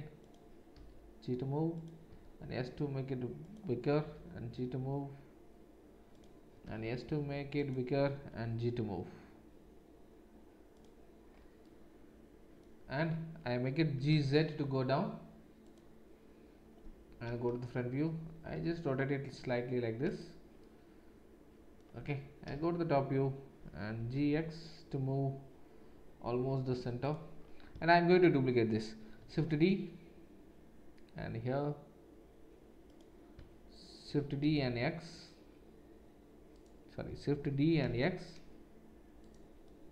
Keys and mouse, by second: 0.7 g, 2.1 s, 4.0 g, 6.6 s, 8.3 g, 13.9 g, 17.2 KP_1, 18.5 r, 22.4 KP_7, 23.9 g, 29.2 shift+d, 34.0 shift+d, 37.4 shift+d.